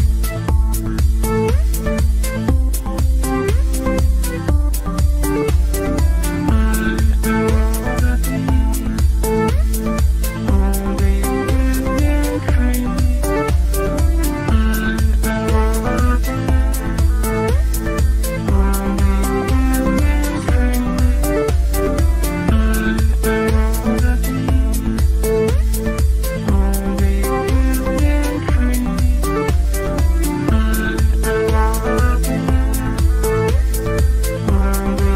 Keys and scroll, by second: 30.3 F3.